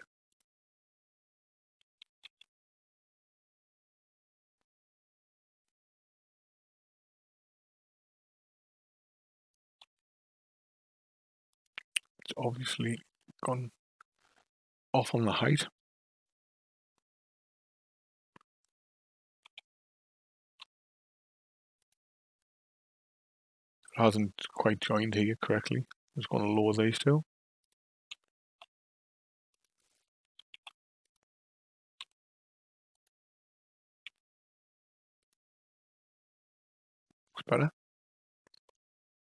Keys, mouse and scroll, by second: 2.2 shift+d, 12.9 KP_5, 13.1 KP_1, 17.1 KP_5, 19.4 g, 25.7 click, 27.6 shift+click, 28.6 r, 30.5 shift+s, 32.0 r, 34.0 g.